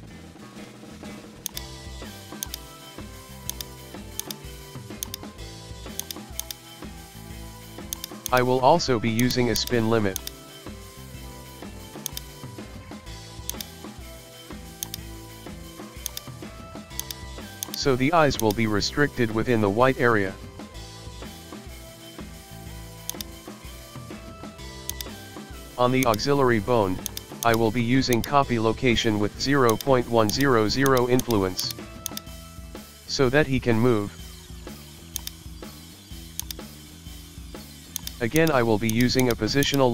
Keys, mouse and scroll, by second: 1.4-2.5 drag, 2.7 shift+middle click, 2.9 scroll up 1, 3.1 shift+middle click, 3.5 right click, 4.2-5.6 drag, 6.4-7.8 drag, 8.3 click, 9.6-11.0 drag, 11.1-11.6 scroll down 1, 11.6-12.1 shift+middle drag, 12.1 right click, 12.3-13.5 middle drag, 13.5-14.9 drag, 15.0-16.0 shift+middle drag, 16.0-17.1 drag, 17.6-18.5 drag, 18.8-19.3 shift+middle drag, 19.3-20.8 scroll up 2, 22.0-22.5 shift+middle drag, 22.5-23.1 scroll up 2, 23.1 right click, 24.9-26.3 drag, 27.1 click, 28.1-29.6 drag, 30.3-33.5 drag, 33.9-35.1 scroll down 1, 35.1-36.6 drag, 38.0 click, 38.9 click, 39.2 click, 39.6-39.9 drag.